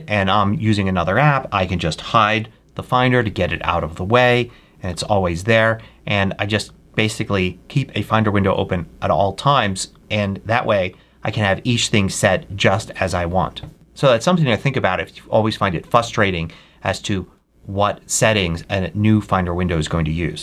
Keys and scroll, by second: 2.2 super+h.